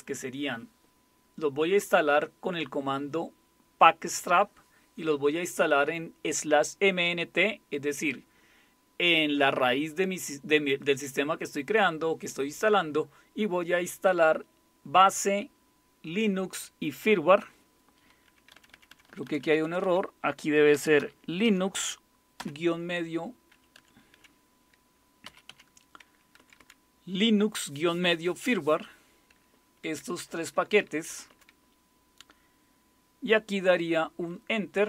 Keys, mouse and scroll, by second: 18.5 Left, 18.7 Left, 18.9 Left, 19.0 Left, 19.6 Left, 20.5-22.4 typing, 23.7 Left, 24.2 Left, 25.0-25.7 typing, 26.4 Right, 26.6 Right, 30.0 Right, 30.2 Right, 30.4 Right, 30.5 Right, 31.1 Right.